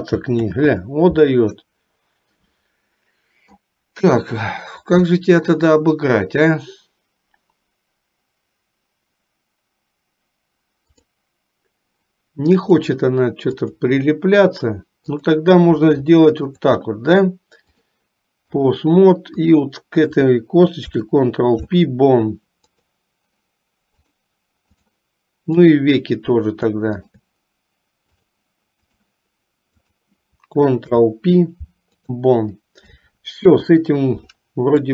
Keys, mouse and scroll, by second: 0.5 ctrl+z, 11.1 click, 12.9-14.1 drag, 15.3 click, 16.5 shift+click, 17.9 click, 19.6 click, 21.0 ctrl+p, 24.3 click, 25.8 click, 27.2 shift+click, 28.4 click, 30.0 click, 31.2 ctrl+p, 33.7 KP_3.